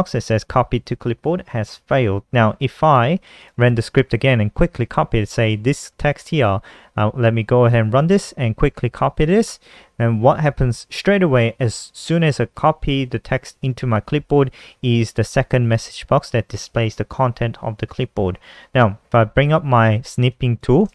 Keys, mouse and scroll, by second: 2.6 click, 3.0 click, 3.6 click, 5.7 click, 6.6 click, 7.9 F5, 8.3 click, 9.6 ctrl+c, 19.8 click.